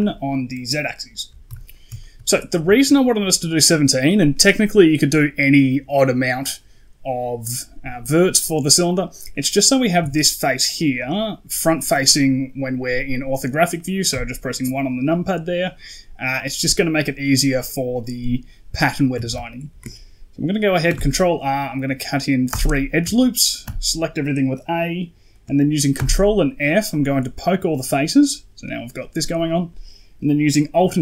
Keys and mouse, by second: 1.4 KP_1, 1.9 shift+middle drag, 9.9 Tab, 10.9 middle click, 13.6 middle click, 14.0 KP_1, 19.0 a, 19.2 a, 20.8 ctrl+r, 23.5 a, 25.8 ctrl+f, 30.9 alt+j.